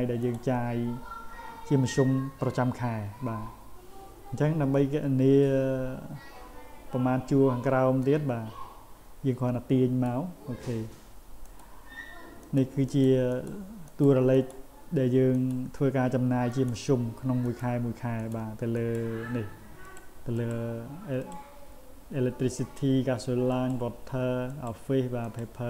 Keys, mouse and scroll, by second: 0.2 click, 8.0-10.0 drag, 11.4 click, 12.4 click, 12.9 click, 13.3 click, 13.9 click, 14.3 click, 15.3 click, 16.5 click, 17.4 click, 18.2 click, 18.7 click, 19.8 click, 20.3 click, 21.2 click, 22.6 click, 23.5 click, 24.5 click, 25.2 click.